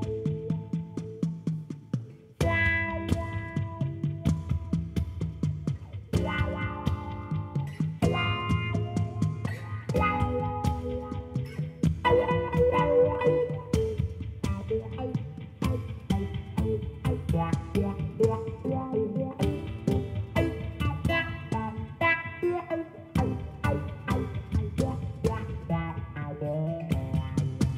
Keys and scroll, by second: 17.2 BackSpace, 17.7 2.